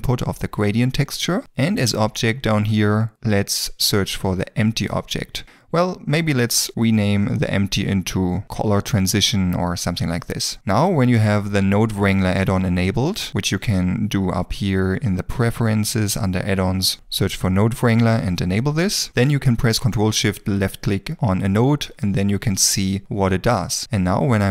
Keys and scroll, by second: 3.1 e, 7.2-8.0 typing, 8.4 Return, 10.3 Return, 17.1 n, 17.1 o, 17.2 e, 20.0 ctrl+s.